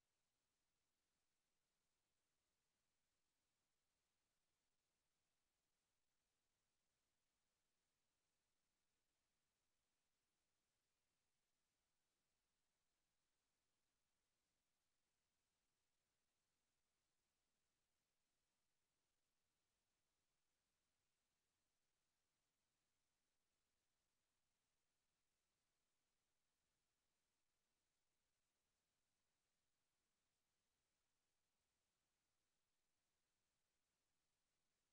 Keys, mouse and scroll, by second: 0.1 Tab, 1.9 s, 5.0 w, 5.8 w, 6.7 w, 11.1 Tab, 13.6 middle click.